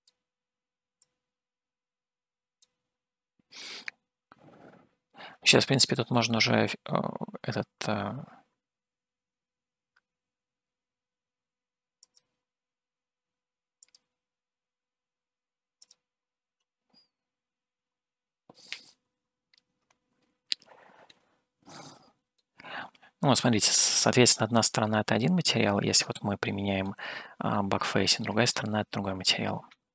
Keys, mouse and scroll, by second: 1.3-3.1 drag, 12.3 click, 14.3 click, 15.8 click, 18.0 scroll up 1, 19.3 Home, 19.7-20.1 scroll up 2, 20.6-22.2 scroll up 7, 22.5-24.9 shift+middle drag, 26.0-27.2 middle drag, 27.6 middle click, 28.9-29.9 middle drag.